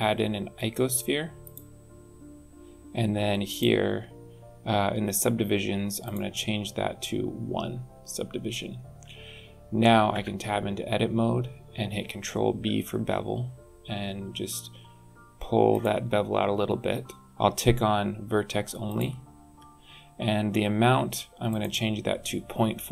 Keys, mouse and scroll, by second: 3.5 click, 6.0 click, 10.3 Tab, 12.7 ctrl+b, 18.9 click, 21.5 click.